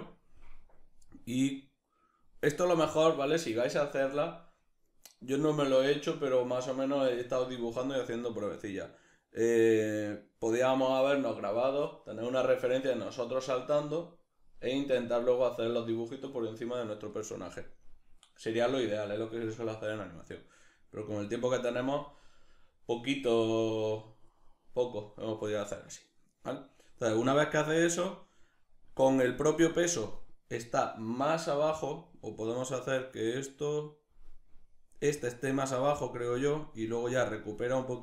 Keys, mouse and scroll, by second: 34.7 click.